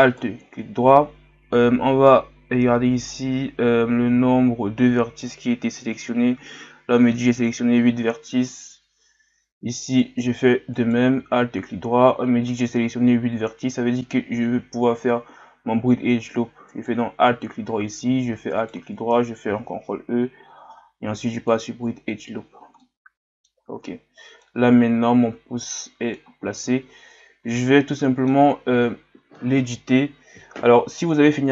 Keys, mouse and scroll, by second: 0.0 alt+right click, 8.5 right click, 9.8 alt+right click, 10.7 alt+right click, 16.7 alt+right click, 18.5 alt+shift+right click, 19.5 ctrl+e, 22.4-22.8 scroll down 5, 22.8 middle click, 23.7 Tab, 24.4-26.7 middle drag, 26.7-27.1 scroll up 2, 27.4 Tab, 27.9 middle click, 28.6 scroll down 1.